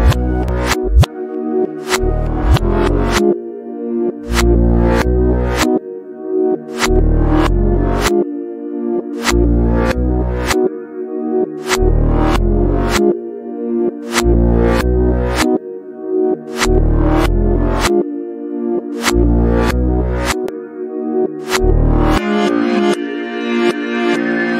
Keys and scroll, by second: 0.7 o, 1.2 f, 8.7 Up.